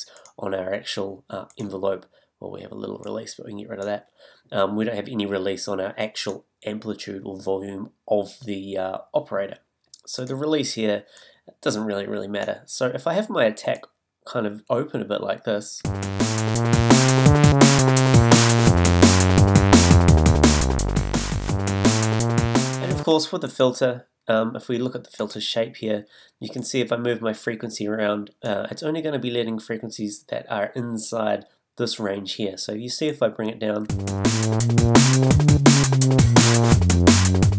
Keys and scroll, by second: 15.8 space, 23.0 space, 33.9 space.